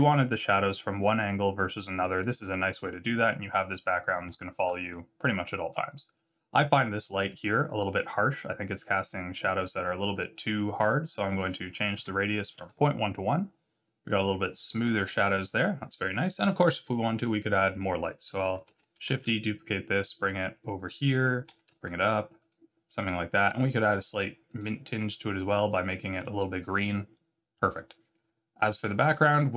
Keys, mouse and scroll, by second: 1.0 middle click, 2.3 shift+middle click, 4.9 middle click, 7.1 click, 11.1 click, 18.6 shift+d, 21.5 g, 23.4 click, 26.7 click, 28.5 right click.